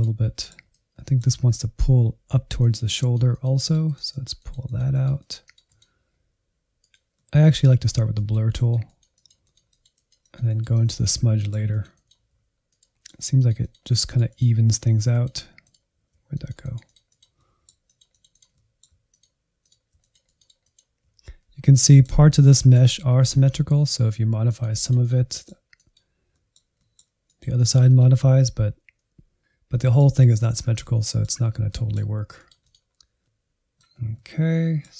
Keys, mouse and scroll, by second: 0.9-1.9 middle drag, 1.9-4.6 drag, 4.6 middle click, 5.2-7.0 drag, 7.0 middle click, 7.4 click, 7.8 scroll down 2, 8.0-9.0 drag, 9.0 middle click, 9.5 alt+z, 10.3 alt+z, 10.5 click, 11.1 middle click, 11.3 click, 11.5 scroll down 1, 11.8 middle click, 11.8 click, 12.7 middle click, 13.0 click, 13.7 click, 13.9 middle click, 14.0 click, 14.1 middle click, 14.4 ctrl+click, 14.6 middle click, 14.8 click, 15.4 middle click, 15.5 click, 15.8 alt+z, 16.2 alt+z, 16.3 click, 16.4 middle click, 16.6 click, 16.8 middle click, 17.2 middle click, 17.3 scroll up 2, 17.4 click, 17.5 middle click, 17.6 click, 17.8 middle click, 17.9 click, 18.2 middle click, 18.3 click, 18.4 middle click, 18.6 click, 18.9 middle click, 19.1 click, 19.2 middle click, 19.4 click, 19.6 middle click, 19.9 click, 20.1 middle click, 20.2 scroll down 1, 20.3 click, 20.9-21.5 scroll down 1, 21.5-23.6 shift+middle drag, 23.6 click, 24.2 middle click, 24.6 click, 25.0 middle click, 25.7 click, 26.4-31.3 middle drag, 31.3 click, 31.8-33.5 middle drag, 33.5 scroll up 1, 33.6 middle click, 34.5 Insert, 34.8 middle click.